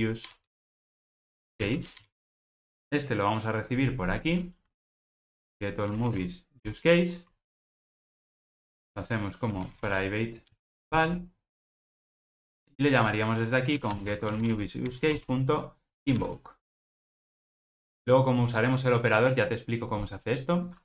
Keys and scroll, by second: 2.4 ctrl+alt+o, 6.7 Return, 10.6 Return, 15.0 Return.